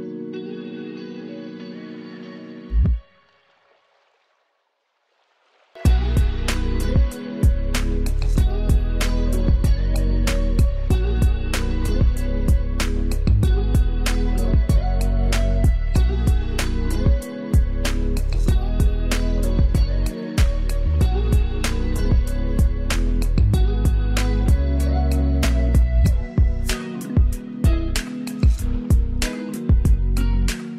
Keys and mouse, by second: 0.1 Return, 0.5 click, 1.6 ctrl+space, 1.9 ctrl+click, 2.2 ctrl+space, 7.1-14.8 drag, 19.1 click, 20.4 Down, 21.2 Up, 24.6 Down, 26.5 ctrl+space, 26.8 ctrl+alt+click, 28.4 ctrl+space, 28.6 ctrl+click, 28.8 ctrl+space, 29.5-30.7 drag.